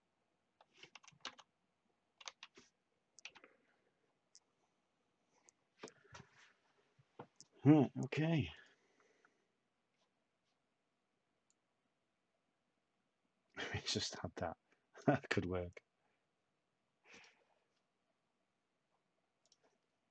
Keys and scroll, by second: 0.0-3.7 typing.